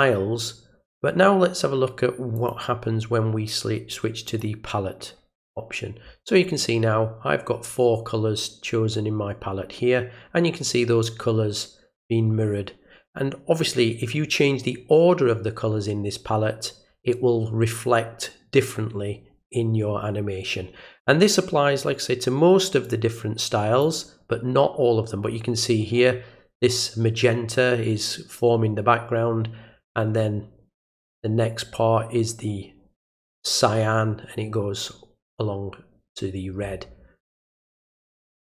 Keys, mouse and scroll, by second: 2.3 click, 4.2 click, 22.8 click, 37.6 click.